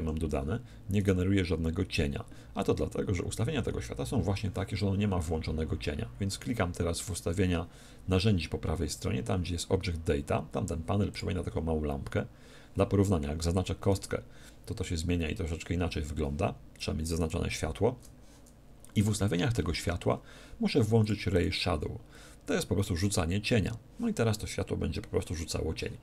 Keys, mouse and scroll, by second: 0.0 Escape, 0.9-2.7 right drag, 11.1-12.8 drag, 13.8-15.6 right drag, 17.2-19.0 right drag, 21.0-23.1 drag.